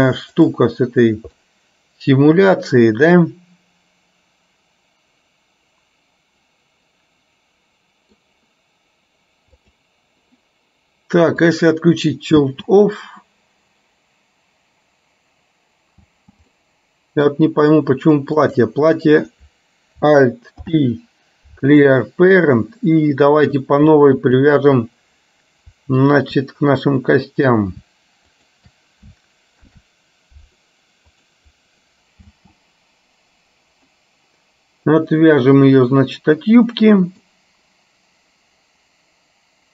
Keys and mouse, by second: 0.5 click, 1.5-8.3 middle drag, 9.7 click, 12.6 space, 16.3 space, 16.6 middle click, 18.6 click, 20.7 alt+p, 24.3 ctrl+click, 26.2 ctrl+click, 28.5 shift+click, 29.7 ctrl+p, 32.3 space, 34.5-38.1 middle drag.